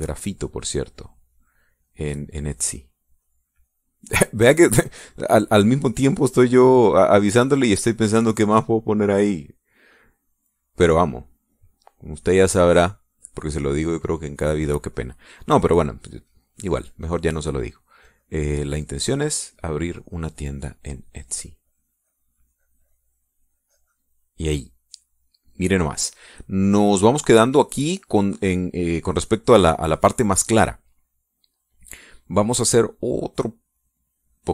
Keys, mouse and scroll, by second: 0.6 middle click, 1.4-3.5 drag, 4.2-7.5 drag, 7.6-8.9 drag, 9.3 middle click, 10.2-11.6 middle drag, 12.1-13.3 middle drag, 13.5 middle click, 13.9 middle click, 17.1-25.3 drag, 25.5 middle click, 26.2 middle click, 27.1-28.4 drag.